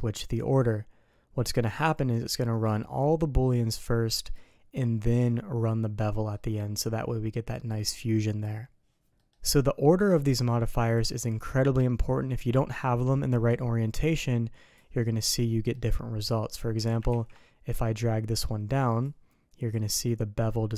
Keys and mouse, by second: 0.5-1.9 drag, 5.9 middle click, 9.1 middle click, 10.9 click, 13.4-14.7 drag, 15.0 middle click, 16.1 middle click, 17.1 ctrl+z, 19.0 click.